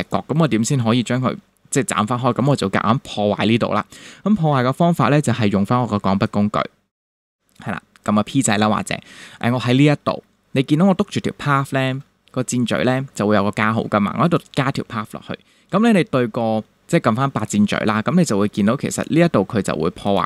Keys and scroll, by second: 11.4 super+=, 15.7 a.